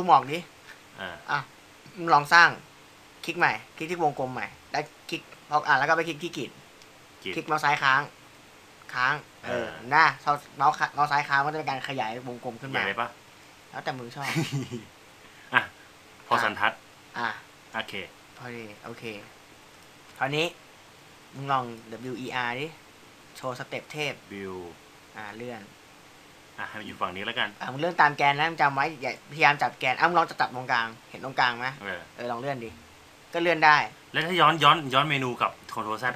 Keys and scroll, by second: 23.5 w.